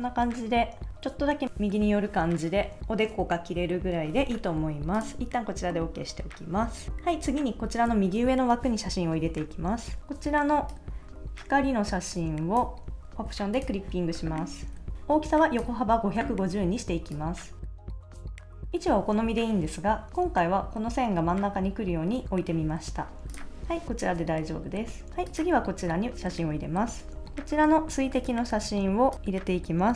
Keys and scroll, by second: 0.9 Return, 9.8 super+Tab, 18.0 shift+Up, 18.2 Down, 18.3 Left, 23.7 super+s, 27.1 super+Tab.